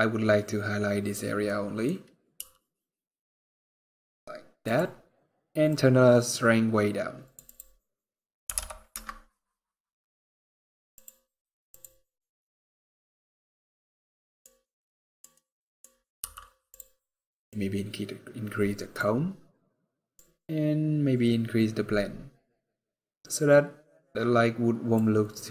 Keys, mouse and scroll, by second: 1.2 middle click, 2.1 r, 5.4 click, 7.3 click, 10.6 click, 11.8 scroll up 2, 13.8 middle click, 14.4 middle click, 15.9 middle click, 15.9 g, 17.2 click, 19.9 click, 25.4 click.